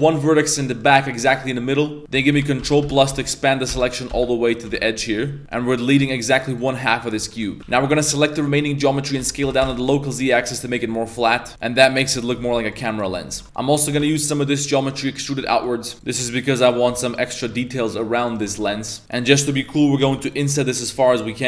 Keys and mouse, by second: 0.6 middle click, 1.3 middle click, 2.1-4.8 ctrl+KP_Add, 5.1 middle drag, 5.4 z, 5.5 middle click, 6.0 x, 7.2 a, 7.4 middle drag, 7.6 s, 7.6 a, 7.8 a, 8.4 middle click, 8.7 middle click, 9.2 s, 11.5 middle click, 11.5-14.0 typing, 11.6 middle drag, 12.1 middle click, 12.5 middle click, 12.9 right click, 13.3 Tab, 13.3 middle click, 15.5 middle click, 15.9 ctrl+r, 15.9 f, 15.9 e, 15.9 x, 16.8 3, 17.0 alt+right click, 17.3 middle click, 18.3 right click, 18.5 e, 19.0 Tab, 19.0 a, 20.0 i.